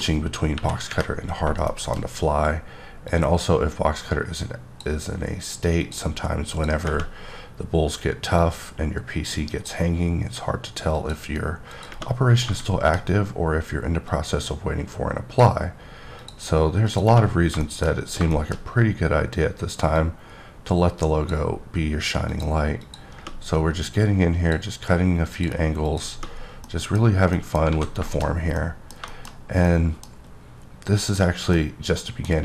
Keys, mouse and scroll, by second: 0.5 KP_1, 0.9 KP_3, 1.7 shift+middle click, 2.0-2.8 shift+scroll up 3, 3.1-4.9 drag, 5.8 click, 6.5 click, 8.4-9.9 drag, 10.9 click, 11.7 click, 12.2 scroll down 2, 12.6 middle click, 13.1-13.4 scroll up 2, 14.1 click, 16.2 click, 16.8 click, 17.3 scroll down 1, 17.6 middle click, 17.9 scroll up 3, 18.3 shift+middle click, 18.6-20.0 shift+scroll up 2, 20.0-21.5 drag, 22.3 click, 22.8 click, 23.9 click, 25.3 click, 25.8 click, 26.4 scroll down 2, 26.7 middle click, 27.3-27.7 scroll down 2, 27.3 middle click, 27.7 alt+a, 28.1 middle click, 28.3 scroll down 1, 28.6 middle click, 29.1 shift+middle click, 29.3 scroll down 1, 29.7 middle click, 30.0-30.3 scroll down 1, 31.3 scroll down 1, 31.5 middle click.